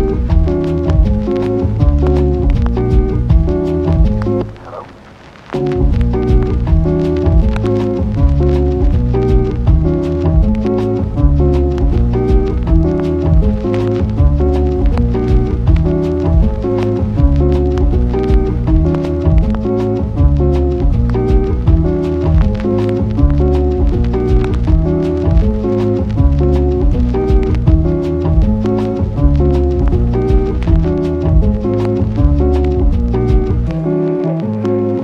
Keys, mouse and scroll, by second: 3.1 Tab, 3.5 click, 4.3-4.7 ctrl+r, 5.3 p, 5.7 Tab, 6.2 click, 6.4 Tab, 6.7 Tab, 7.0 Tab, 7.9 g, 8.5 shift+middle click, 9.8-10.4 ctrl+r, 11.4 KP_1, 13.4 g, 13.8 g, 13.9 g, 14.8 click, 15.0 ctrl+r, 16.4 ctrl+r, 18.0-18.8 ctrl+r, 19.9-20.4 ctrl+r, 22.6 click, 23.5 g, 23.7 g, 26.1 g, 26.2 g, 26.7 g, 26.9 g, 28.0 g, 28.2 g, 28.5 click, 29.0-29.5 ctrl+r, 30.0-30.3 ctrl+r, 30.6 click, 32.6 click, 33.2 a, 34.7 click.